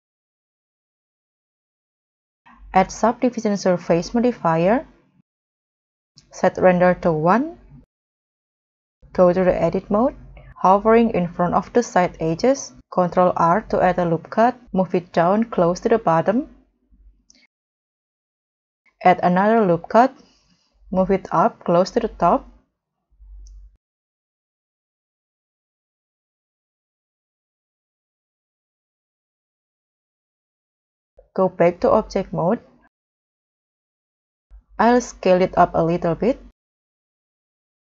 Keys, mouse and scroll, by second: 5.1 scroll down 2, 5.5 middle click, 6.4 middle click, 7.8 scroll up 2, 10.3 scroll up 1, 13.1 ctrl+r, 18.6 ctrl+r, 24.1 middle click, 25.2 middle click, 25.5-26.0 scroll down 4, 26.0 scroll up 1, 27.2 scroll up 3, 31.1 double click, 32.4 middle click, 33.3 middle click, 33.9 scroll up 1, 35.1 w, 35.1 s, 36.6 middle click, 37.7 scroll down 1.